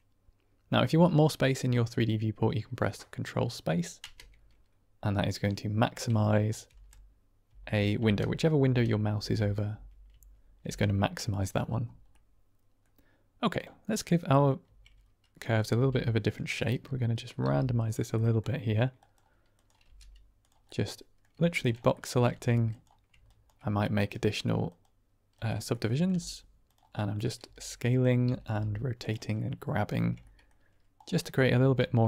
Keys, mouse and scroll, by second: 1.2-2.3 drag, 3.9 ctrl+space, 5.1-6.1 drag, 6.6 ctrl+space, 7.9 ctrl+space, 8.5 ctrl+space, 9.1 ctrl+space, 10.0 ctrl+space, 10.5 ctrl+space, 12.0-12.3 drag, 12.3-12.7 middle drag, 13.5-13.8 drag, 13.8-14.3 middle drag, 14.5 Tab, 15.5 click, 15.7 g, 16.2 click, 16.5 middle click, 17.3 r, 17.7 click, 18.0 middle click, 19.5 click, 19.7 g, 20.3 click, 20.6 middle click, 21.2 Tab, 21.8 middle drag, 22.2 Tab, 22.6 click, 23.9-24.7 right drag, 25.2 click, 25.6 middle click, 26.5 click, 26.5 g, 26.9 middle click, 27.8 click, 27.8 s, 28.1 r, 28.4 r, 28.9 click, 29.3 middle click, 29.9 Tab, 30.1 middle click, 30.9 click, 31.1 middle click, 31.5 Tab.